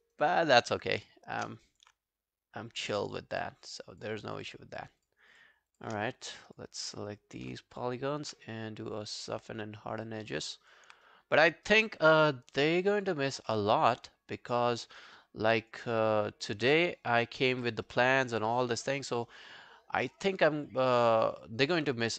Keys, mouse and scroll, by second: 0.1 alt+right click, 0.2 alt+click, 1.6 alt+click, 2.7 shift+click, 3.1-4.7 shift+click, 5.7 shift+click, 6.1 alt+click, 6.8 alt+click, 7.8 shift+click, 10.3 scroll down 3, 10.5 alt+click, 11.1 right click, 12.3 alt+scroll down 1, 12.6 alt+click, 13.3 alt+scroll up 2, 13.5 alt+middle click, 14.0 alt+click, 14.6 alt+middle click, 15.0 alt+scroll down 1, 15.2 alt+click, 16.0 alt+click, 16.7 alt+middle click, 17.7 alt+middle click, 17.9 alt+right click, 18.1 alt+click, 18.5 alt+middle click, 18.7 alt+right click, 19.0 alt+middle click, 19.3 alt+right click, 19.5 alt+click, 21.0 alt+middle click, 21.2 alt+right click, 21.5 alt+click, 22.0 right click.